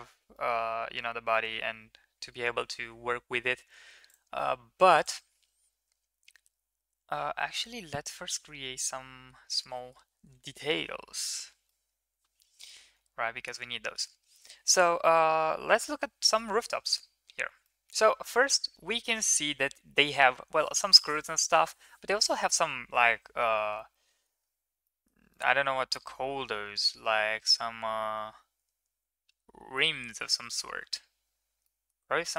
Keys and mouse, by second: 0.3 middle click, 1.4 Tab, 4.0 drag, 5.1-7.5 drag, 7.9-9.3 middle drag, 10.4 shift+middle drag, 11.2 shift+middle drag, 11.6-13.9 middle drag.